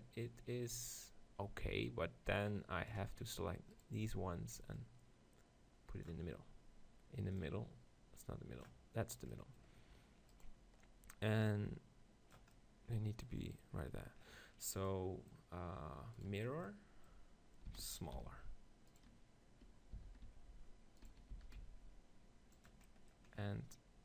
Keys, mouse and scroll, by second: 3.8-5.6 right drag, 4.8-6.7 drag, 5.6 middle click, 7.4-9.1 drag, 9.1 middle click, 10.4-12.4 right drag, 11.5-13.5 drag, 14.4-16.2 middle drag, 16.2-18.1 right drag, 17.7 s, 18.1 middle click, 19.0-20.7 right drag, 20.0 s, 20.7 middle click, 21.1-23.0 right drag, 21.3 s, 22.7-24.0 drag.